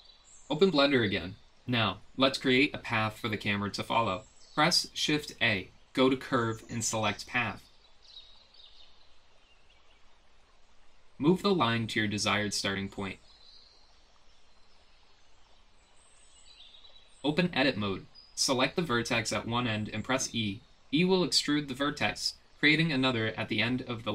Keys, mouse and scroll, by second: 1.5 click, 5.5 shift+a, 11.6 g, 13.6 KP_1, 14.2 g, 15.4 KP_7, 16.6 click, 17.3 Tab, 17.6 g, 18.1 s, 18.7 g, 22.8-23.8 drag.